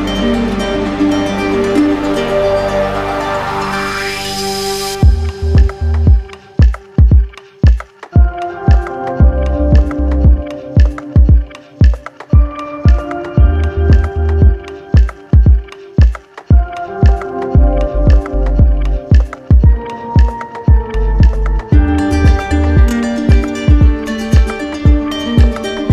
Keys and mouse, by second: 1.4 click, 1.6 ctrl+z, 3.6 click, 3.8 ctrl+z, 5.4 click, 5.5 ctrl+z, 9.3 click, 10.4 click, 11.1 click, 12.2 shift+click, 13.1 shift+click, 13.7 click, 14.4 click, 15.4 shift+click, 15.8 shift+click, 16.4 shift+click, 18.3 click, 19.2 right click, 20.7 right click, 21.9 right click, 22.9 right click, 23.9 right click.